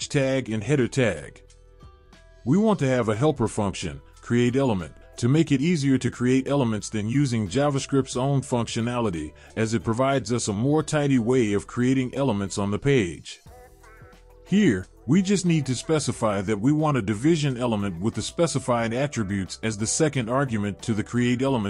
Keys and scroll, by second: 2.5 Return, 3.8 Return, 4.0 ctrl+v, 9.4 ctrl+s.